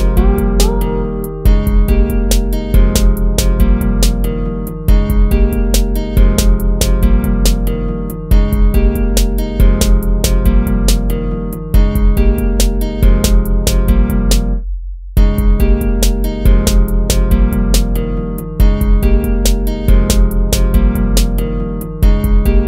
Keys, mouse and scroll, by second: 0.5 ctrl+-, 3.5 ctrl+-, 3.7 ctrl+-, 4.3 ctrl+-, 5.7 ctrl+-, 7.1 ctrl+-, 8.1 ctrl+z, 8.6 ctrl+-, 9.0 ctrl+-, 12.5 ctrl+-, 15.0 ctrl+z, 16.3 ctrl+-, 17.6 ctrl+z, 18.0 ctrl+-, 19.4 ctrl+z, 19.7 ctrl+-, 22.1 ctrl++, 22.4 ctrl+z.